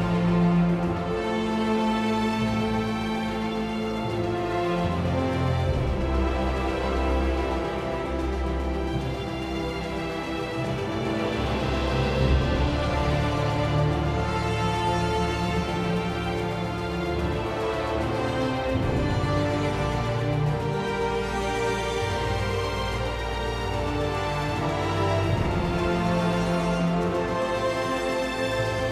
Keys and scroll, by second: 6.7 End, 7.5 ctrl+a, 7.7 ctrl+c, 8.7 super+r, 9.1 ctrl+v, 9.7 Return, 14.5 Return, 17.7 Escape.